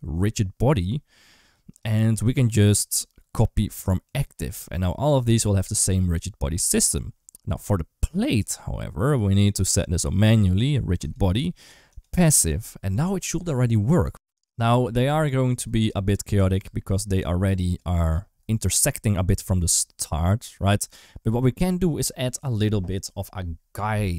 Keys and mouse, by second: 7.9 click, 11.7 click, 13.5 ctrl+s, 15.9 space, 16.5 space, 17.6 click.